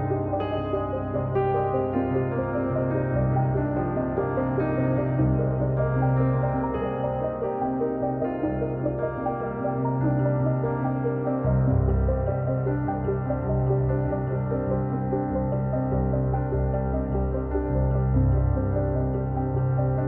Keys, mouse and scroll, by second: 0.6 middle click, 1.1 click, 1.3 middle click, 1.6-2.8 drag, 4.1 ctrl+z, 4.4-5.6 drag, 5.6 middle click, 5.9 click, 6.4-7.6 middle drag, 7.6 scroll down 1, 7.7 middle click, 8.1 click, 8.5 scroll down 1, 8.6 middle click, 9.2 click, 9.4 middle click, 9.6-10.1 scroll up 2, 10.1 click, 10.7 scroll down 2, 11.0 KP_1, 11.7 click, 12.2-12.9 scroll up 3, 12.9 click, 13.8-15.4 drag, 19.7-20.0 drag.